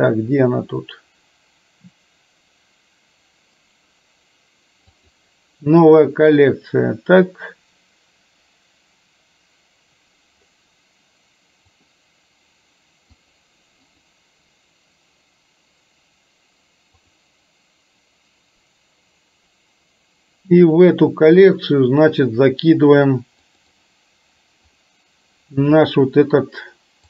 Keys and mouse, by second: 3.6-5.1 right drag, 13.3 click, 23.6-24.8 drag.